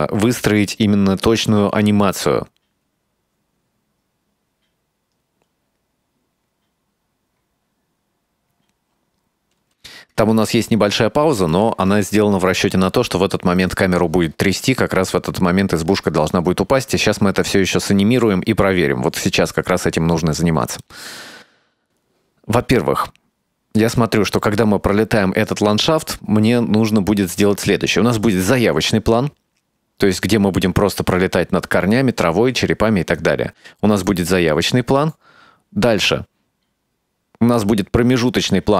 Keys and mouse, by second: 9.9 space, 10.7 ctrl+middle click, 12.5-18.3 drag, 20.9-30.4 drag, 33.3-38.7 drag.